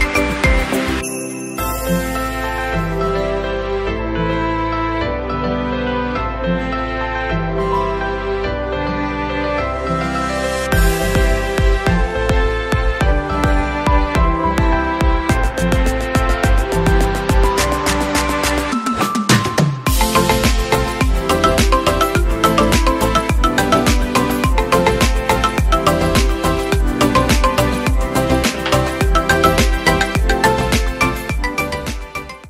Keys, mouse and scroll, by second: 4.1 scroll up 2.